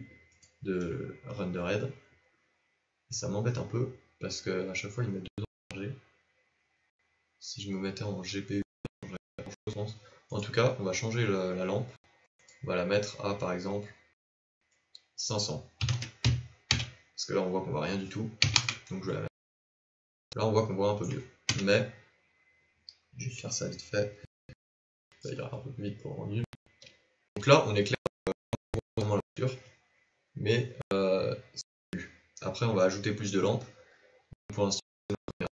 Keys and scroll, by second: 21.4 KP_0, 24.2 ctrl+b.